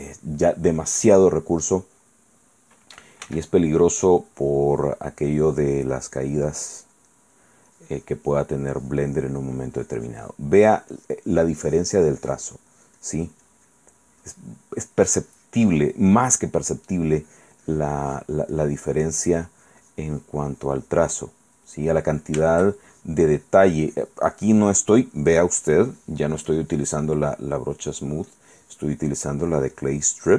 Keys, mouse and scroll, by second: 0.0 click, 2.3 click, 3.4 f, 3.7 click, 4.1-7.2 drag, 7.3 middle click, 7.9 click, 9.4 middle click, 9.9 click, 10.8-14.1 drag, 14.2 click, 14.8-16.3 drag, 16.4 click, 17.2-20.6 drag, 20.7 click, 22.0 click, 23.1-24.4 shift+drag, 24.5 shift+click, 25.8 click, 26.7 click, 28.5 click, 29.4-30.3 drag.